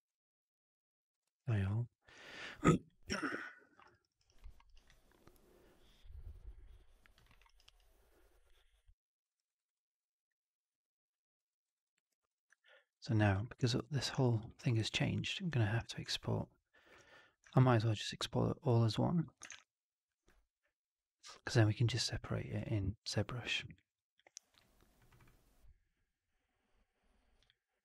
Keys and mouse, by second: 1.2 drag, 1.4 alt+middle drag, 1.6 alt+right drag, 1.8 alt+drag, 2.7-3.1 drag, 3.1 alt+right drag, 3.3 alt+drag, 3.6 alt+middle drag, 3.8 alt+right drag, 3.9 alt+right click, 4.1 alt+right drag, 4.3 alt+middle drag, 4.6 alt+right drag, 4.8-7.1 alt+drag, 7.2 alt+middle drag, 7.4 alt+right drag, 7.6 alt+right click, 8.4-9.2 alt+drag, 9.3 alt+right drag, 9.5 alt+right drag, 9.7-11.3 alt+drag, 11.4 alt+middle drag, 11.6 alt+right drag, 11.8 alt+click, 12.2 click, 12.5 alt+drag, 12.7 alt+middle drag, 12.8 alt+right drag, 13.1 alt+drag, 14.1 alt+drag, 14.5 alt+middle drag, 14.9 alt+drag, 15.4-15.9 drag, 16.0-16.9 alt+drag, 17.6 alt+right drag, 17.8-19.1 alt+drag, 19.4 shift+Tab.